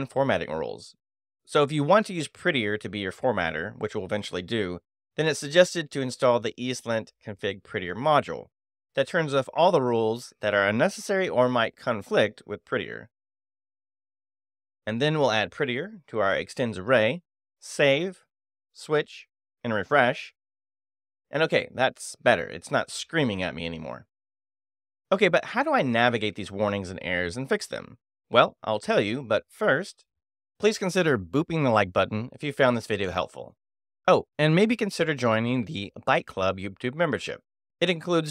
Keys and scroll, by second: 0.8 ], 0.9 b, 3.5 space, 3.6 f, 3.9 t, 7.7 super+v, 9.3 Return, 11.2 e, 11.5 x, 11.6 i, 11.7 t, 12.2 Return, 13.5-15.5 typing, 13.8 Return, 15.2 Escape, 15.5 Return, 18.4 [, 18.5 b, 20.0 shift+e, 20.3 Return.